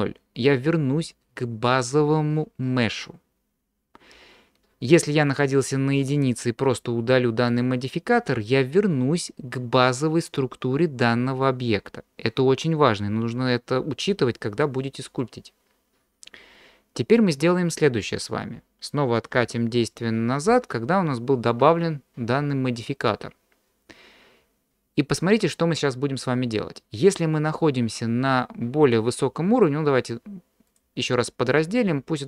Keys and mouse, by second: 5.7 click, 7.5 click, 19.8 ctrl+z, 20.5 ctrl+z, 30.7 click.